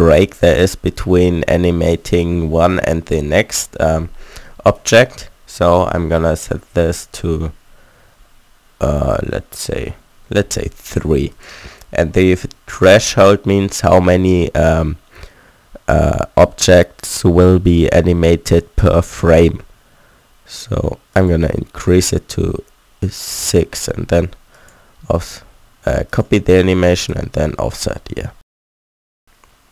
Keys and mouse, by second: 27.9 alt+a, 28.8 a.